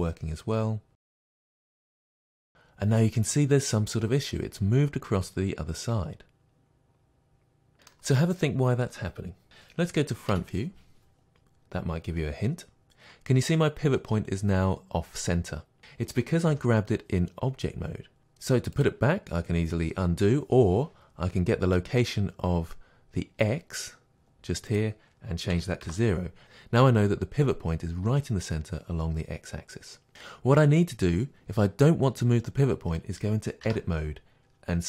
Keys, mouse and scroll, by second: 1.3-18.9 middle drag, 10.3 KP_1, 16.5 g, 18.9 click, 24.7-34.8 drag, 25.9 Return, 33.7 Tab.